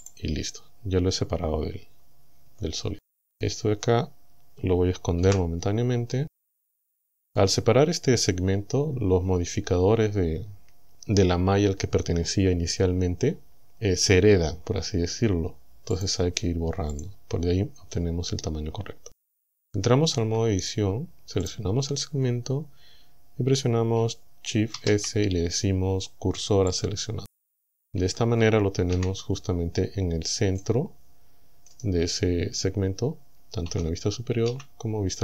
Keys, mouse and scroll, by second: 0.1 click, 2.5 Tab, 5.3 h, 7.3 right click, 16.0 click, 17.0 click, 20.2 Tab, 21.5 right click, 24.8 shift+s, 26.7 click, 28.0 Tab, 28.9 KP_1, 33.7 KP_7, 34.5 KP_1.